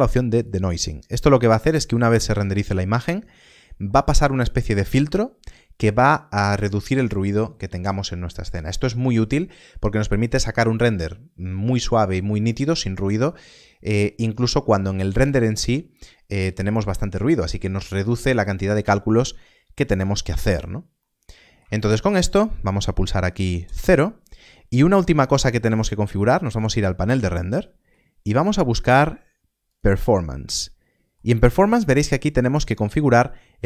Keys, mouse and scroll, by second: 0.3 click, 20.9 middle click, 21.8 shift+middle click.